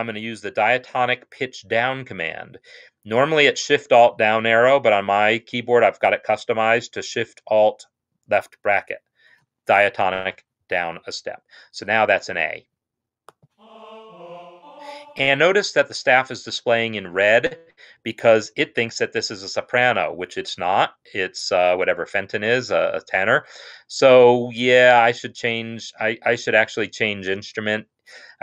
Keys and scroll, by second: 8.7 alt+shift+[, 13.8 Right, 14.2 Right.